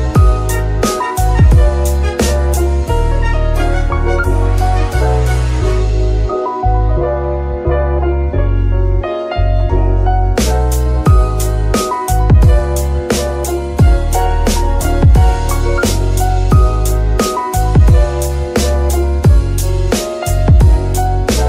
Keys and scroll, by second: 0.3 y, 3.3 g, 3.3 z, 11.5 KP_3, 12.4 z, 17.3 alt+shift+s, 21.3 Tab.